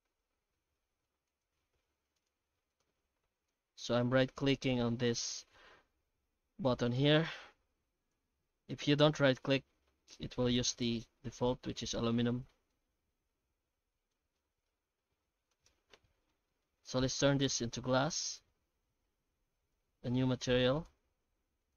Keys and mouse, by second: 0.0 alt+x, 5.4 alt+x, 8.5 alt+x, 10.4-11.5 middle drag, 12.1-12.5 shift+middle drag, 12.7-14.1 middle drag, 15.0 alt+a, 15.5 right click, 16.0 middle click, 16.9 alt+x.